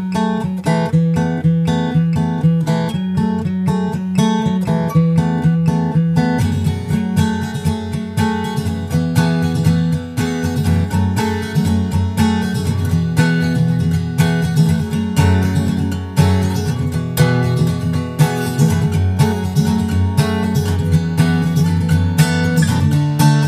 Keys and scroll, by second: 9.1 super+Tab, 9.6 super+Tab, 9.8 super+Tab, 9.9 super+Tab, 11.2 super+s, 11.5 super+Tab, 13.1 super+Tab, 16.4 super+s.